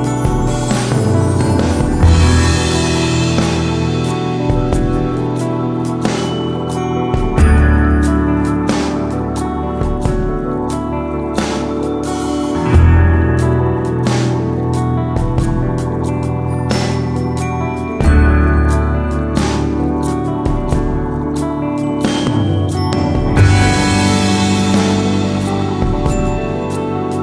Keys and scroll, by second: 0.3 super+d, 0.9 super+d, 3.6 Right, 3.7 Right, 4.1 Up, 4.2 Up, 4.3 Left.